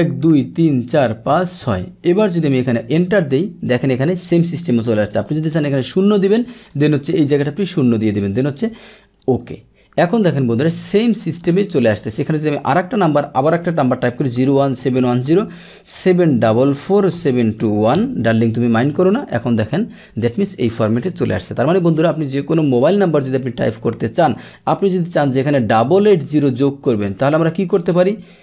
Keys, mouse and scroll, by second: 2.4 Return, 2.6 Return, 5.3 ctrl+1, 6.6 click, 8.7 Delete, 9.2 Return, 9.4 Return, 9.4 Delete, 10.6 click, 12.1 click, 17.9 Return, 20.2 click, 25.1 ctrl+1, 26.6 click, 27.2 click.